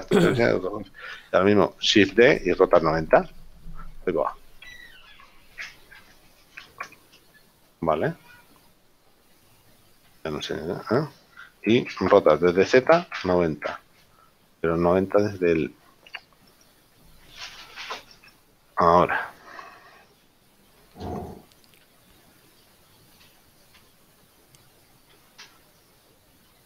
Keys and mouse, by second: 3.3 KP_0, 4.7 Escape, 7.0 KP_7, 10.7 right click, 12.3 r, 12.7 z, 14.0 KP_0, 14.7 Escape, 16.0 middle click, 17.0 shift+right click, 21.8 ctrl+z, 25.4 g, 25.8 right click.